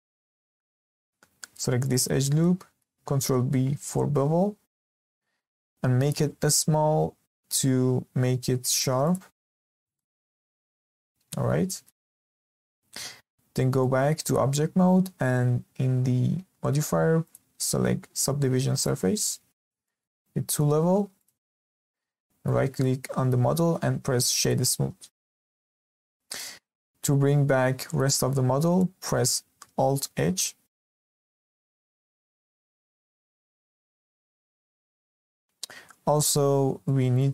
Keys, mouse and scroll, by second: 0.6 2, 1.8 alt+click, 2.4 middle click, 3.3 ctrl+b, 9.5-9.9 scroll down 3, 9.9-12.0 shift+middle drag, 12.0-12.9 scroll down 2, 12.9 Tab, 13.5 scroll up 1, 13.8-16.8 shift+middle drag, 17.2-19.6 drag, 19.6 scroll up 2, 19.8-21.1 shift+middle drag, 21.1-22.2 drag, 22.2-22.7 shift+middle drag, 22.7-25.8 right drag, 26.0-26.3 scroll down 2, 26.3-28.5 middle drag, 28.5 scroll down 1, 28.7-29.9 shift+middle drag, 29.9 alt+h, 31.2 scroll up 2, 31.5-32.2 scroll down 5, 32.2 shift+middle click, 32.7-33.3 scroll down 2, 33.3-33.7 scroll up 1, 33.7-35.2 shift+middle drag, 35.2-35.5 scroll down 2, 35.5-36.1 scroll up 6, 36.1-36.5 shift+middle drag, 36.5-36.8 scroll up 1, 36.8-37.3 shift+middle drag.